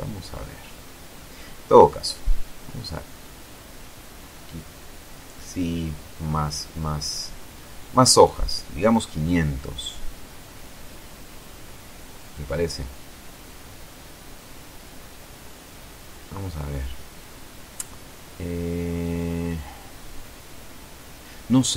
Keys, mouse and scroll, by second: 0.8 click, 2.7-3.4 scroll up 2, 5.4 click, 7.3 KP_5, 7.5 KP_0, 7.6 KP_Enter, 9.9-11.0 scroll up 2, 11.0-12.0 scroll down 2, 12.0 click, 12.6 middle click, 13.1-15.5 drag, 15.5 middle click, 15.8 KP_0, 21.6 click.